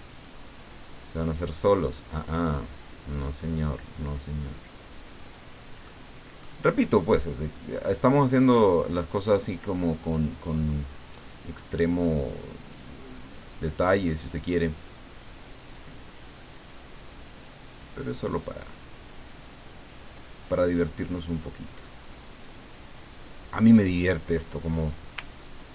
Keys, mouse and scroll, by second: 0.4 click, 1.2 click, 2.3 click, 3.8-5.9 drag, 7.9 click, 10.4 click, 12.0-14.4 drag, 15.6-19.8 drag, 21.1-24.6 drag, 25.1-25.7 ctrl+scroll down 2.